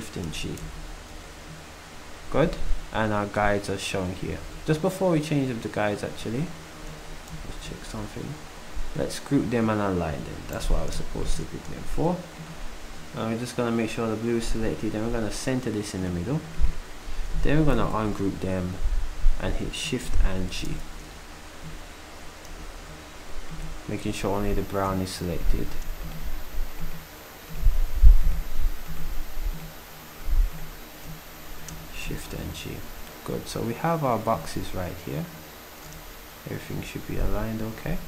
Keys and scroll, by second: 0.6 shift+g, 7.3 \, 10.6 g, 17.8 ctrl+u, 20.7 g, 22.5 z.